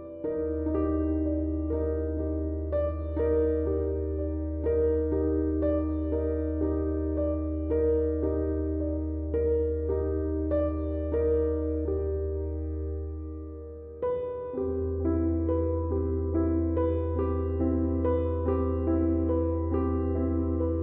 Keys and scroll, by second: 1.7 3, 3.2 4, 4.0 3, 6.9 ], 7.3 ], 8.2 4.